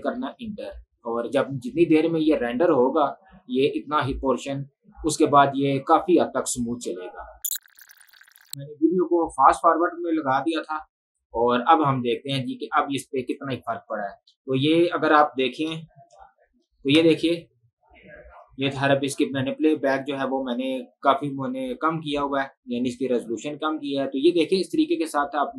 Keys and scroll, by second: 0.6 Return, 17.0 space.